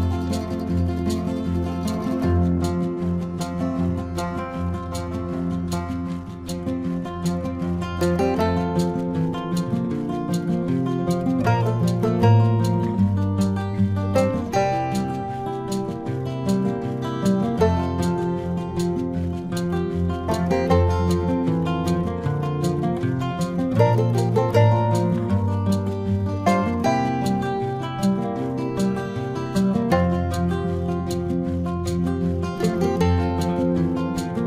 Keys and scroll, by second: 0.3 space, 0.9 space, 1.1 ctrl+alt+z, 2.9 space, 5.1 space, 5.8 ctrl+alt+z, 6.5 space, 8.9 ctrl+alt+z, 9.3 ctrl+alt+z, 9.5 ctrl+-, 10.2 space, 12.8 ctrl+-, 19.2 ctrl+-, 20.3 space, 20.6 ctrl+=, 21.1 space, 21.3 ctrl+=, 21.6 space, 22.5 ctrl+alt+z, 23.9 ctrl+alt+z, 25.3 space, 29.7 space, 31.1 space, 32.7 space.